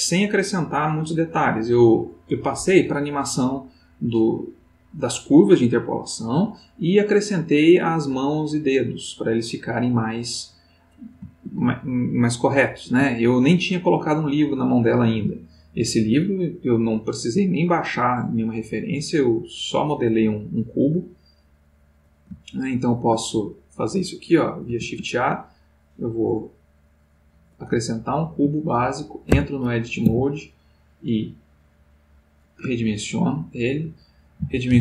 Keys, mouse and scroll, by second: 11.7-13.6 ctrl+middle drag, 15.3 click, 16.9-19.3 middle drag, 19.8 click, 20.5-23.9 middle drag, 24.8 shift+a, 26.5 click, 27.7-29.3 ctrl+middle drag, 29.3 Tab, 30.0 s, 32.3 click, 32.9-33.9 ctrl+middle drag, 34.3-34.8 typing.